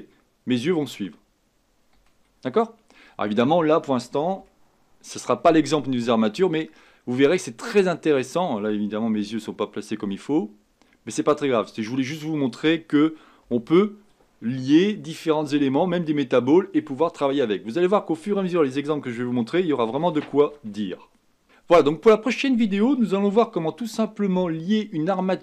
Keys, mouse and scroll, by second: 2.9-4.2 scroll down 6, 4.5-5.7 shift+middle drag, 5.7-6.4 scroll up 4, 6.4-6.8 scroll down 2, 13.4 KP_1.